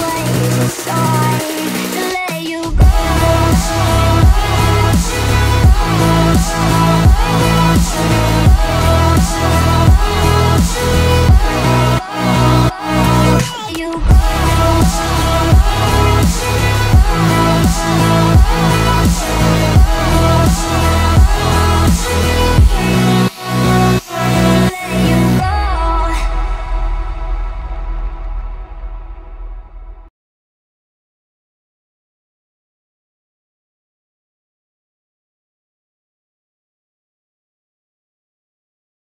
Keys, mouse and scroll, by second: 0.5 scroll up 1, 1.5 click, 2.4 space, 2.6-2.9 scroll up 1, 3.4 click, 4.3 scroll down 1, 5.0-11.1 drag, 11.1 shift+middle click, 11.6-12.2 scroll up 1, 12.2 middle click, 12.5 b, 13.0 click, 13.9 space, 14.5 click, 14.8 middle click, 16.7 click, 19.4-22.5 scroll down 1, 22.8 click, 23.6-24.0 scroll up 1, 25.0 space, 25.5 click, 27.2 b, 27.4 click, 27.8 scroll down 1, 28.2 shift+middle click, 28.6 scroll up 1, 29.2 click, 29.5 space, 29.6 scroll down 1, 30.6 click, 31.2 middle click, 31.4 scroll up 1, 32.0 middle click, 32.8-33.4 scroll down 1, 33.4 click, 34.4 scroll up 1, 34.6 shift+middle click, 36.7 shift+click, 37.7 m, 37.8 click, 39.0 Left.